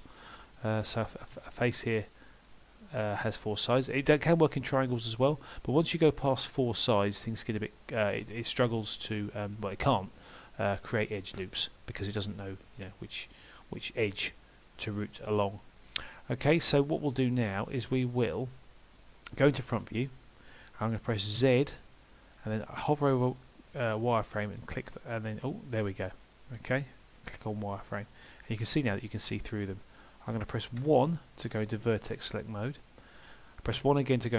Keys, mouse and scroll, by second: 2.3 click, 4.1 middle click, 7.3-8.0 scroll down 1, 8.0 middle click, 15.6 middle click, 19.7 KP_1, 21.4 z, 28.0 middle click, 30.8 1, 33.8 KP_1.